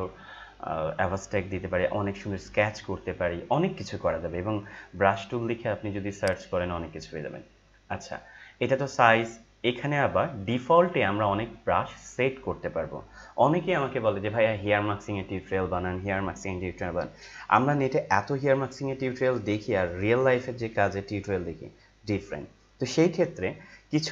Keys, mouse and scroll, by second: 9.3-9.7 scroll down 1.